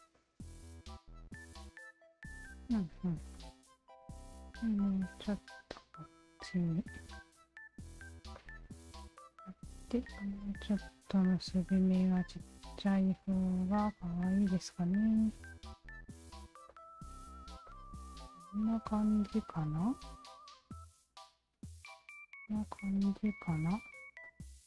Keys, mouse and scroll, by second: 0.2 alt+click, 1.9 alt+click, 2.2 Tab, 2.8 alt+right click, 3.3 click, 5.1 click, 6.3 click, 7.4 click, 8.3 click, 9.4 alt+right click, 10.2 click, 11.1 alt+click, 12.3-14.4 alt+drag, 15.0 alt+click, 15.8 alt+click, 16.7 alt+click, 16.9 Tab, 17.2 alt+right click, 17.7 click, 18.7-19.9 alt+drag, 20.2-20.8 alt+right drag, 21.3 alt+click, 21.5 Tab, 22.0 alt+click, 23.0 alt+click, 23.5 alt+click, 24.2 shift+click.